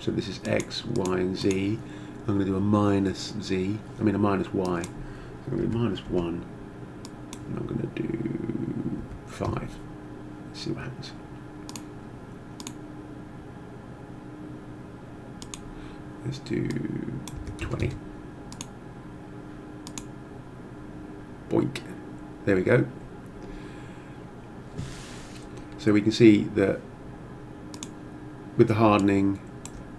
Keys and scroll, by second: 5.6 -, 6.1 1, 9.0 5, 9.4 Return, 17.4 2, 17.7 0, 17.8 Return.